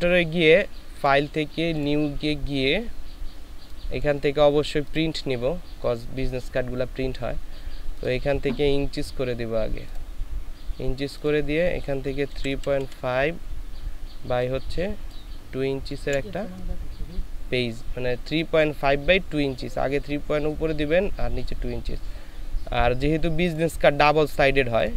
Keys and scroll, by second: 12.3 KP_3, 12.5 KP_Decimal, 12.8 KP_5, 15.9 KP_2.